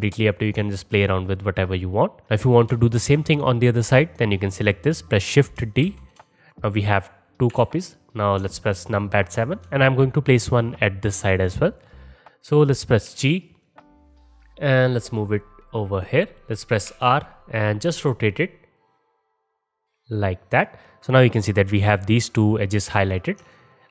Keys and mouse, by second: 0.6-2.2 alt+drag, 5.9 shift+d, 7.5 KP_7, 8.4-13.5 alt+shift+middle drag, 13.1 g, 16.9 r, 23.4-23.9 alt+drag.